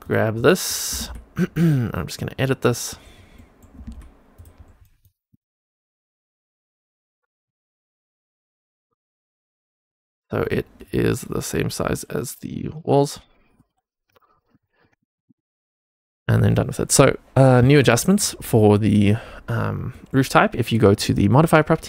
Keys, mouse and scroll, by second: 0.3 middle click, 0.8 g, 1.8 middle click, 2.3 scroll down 2, 2.6 middle click, 3.0 scroll up 2, 3.3 middle click, 3.6 g, 4.5-4.9 scroll down 2, 4.7 middle click, 5.2 Tab, 5.7 middle click, 6.2 2, 6.5 click, 7.4 g, 8.9 click, 9.8 g, 10.8 click, 11.8 g, 12.6 click, 13.5 g, 14.3 scroll up 2, 14.6 shift+middle click, 14.9 middle click, 15.2 Tab, 15.6 click, 16.2 click, 17.8 middle click, 18.3 scroll up 2, 18.6 shift+middle click, 19.8 middle click, 21.0 click.